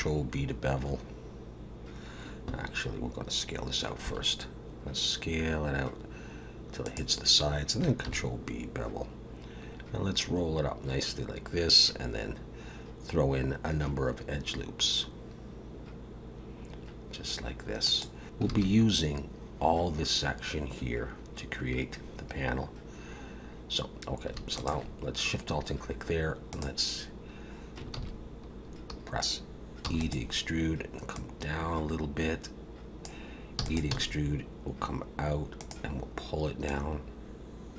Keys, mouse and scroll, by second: 4.0 s, 8.0 ctrl+b, 18.2 ctrl+z, 18.5 alt+a, 24.5 alt+shift+click, 26.5 click, 27.9 ctrl+z, 29.8 e, 31.1 click, 33.6 e, 33.9 s, 36.6 click.